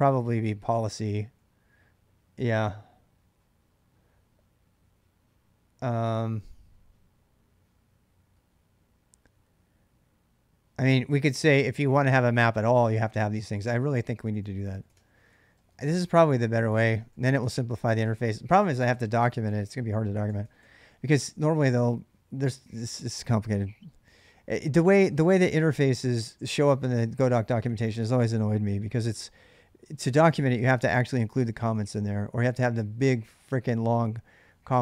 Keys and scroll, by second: 0.0-1.5 typing, 11.5-21.6 typing, 30.3 k, 30.6 j, 32.0-32.7 typing.